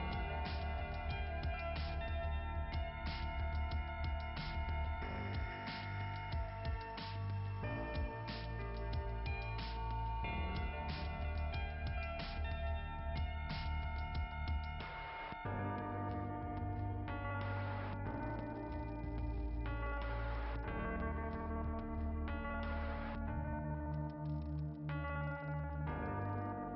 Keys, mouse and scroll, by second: 0.4 click, 1.6 click, 3.6 click, 5.3 click, 7.0 click, 12.1 click, 12.9 click, 13.6 click, 14.1 click, 14.7 click, 15.0 click, 15.0 double click, 15.2 double click, 15.5 double click, 15.6 double click, 15.8 double click, 16.2 double click, 16.4 double click, 19.2 alt+], 19.3 alt+], 19.7 alt+], 20.1-21.5 typing, 22.9 click, 24.0 ], 24.9 ], 25.8 click.